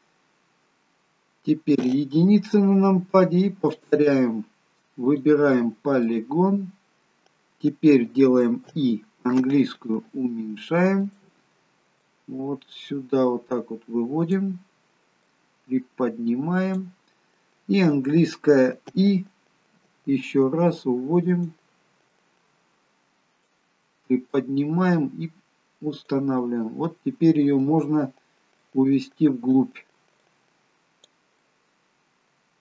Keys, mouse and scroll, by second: 1.9 KP_1, 3.2-3.8 scroll up 1, 3.8 click, 3.8-4.9 scroll up 1, 5.2 click, 6.2 click, 8.7 i, 12.2 click, 15.3 click, 22.3 click, 22.3 i, 24.3 click, 26.6 middle click, 27.7-28.6 scroll down 3, 28.6 middle click, 28.6-29.6 scroll down 1, 30.2 click, 31.4 middle click.